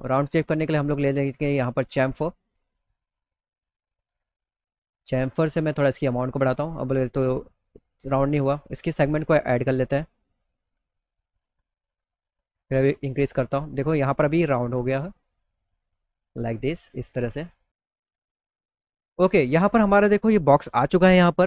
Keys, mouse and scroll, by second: 0.0 click, 1.5 click, 5.1-6.7 drag, 7.9 click, 8.3 click, 8.6 click, 8.8 click, 9.1 click, 9.3 click, 10.9-14.0 drag, 14.8 click, 15.3 click, 15.7 middle click, 15.9 middle click, 16.2 middle click, 16.7 middle click, 17.2 middle click, 17.4 alt+middle click, 17.8 middle click, 18.1 alt+middle click, 18.6 middle click, 18.9-20.1 middle drag, 20.9 middle click, 21.3 middle click.